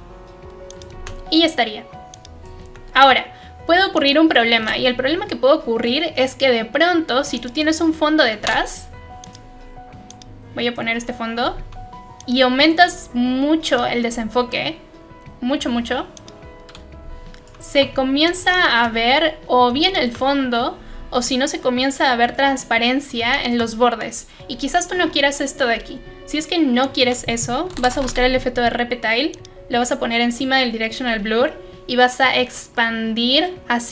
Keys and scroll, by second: 8.3 ctrl+y, 25.0 ctrl+z, 27.4-29.7 typing.